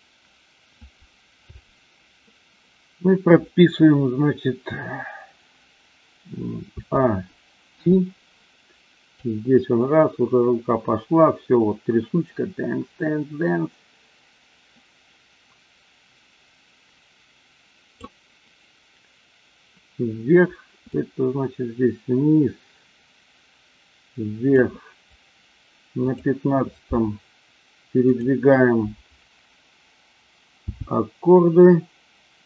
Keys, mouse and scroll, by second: 6.6 a, 7.8 i, 9.2-18.0 drag, 20.9-24.5 drag, 26.0 click, 28.0 click, 30.6 g.